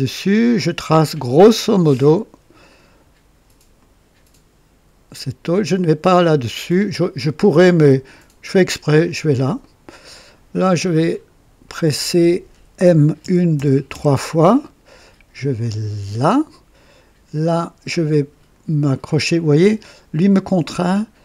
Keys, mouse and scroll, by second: 0.5 click, 2.0 click, 2.6 right click, 3.7 right click, 8.9 click, 9.5-10.8 right drag, 11.0-11.3 scroll down 1, 11.6 right click, 13.1-13.9 typing, 16.1 click.